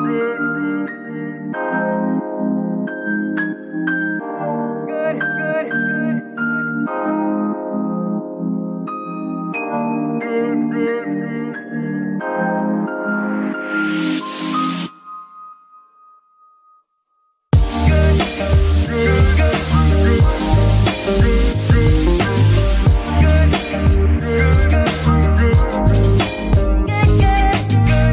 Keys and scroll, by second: 1.3 ctrl+shift+s, 17.4 ctrl+Tab, 18.4 r, 18.6 x, 19.2 Escape, 21.4 a.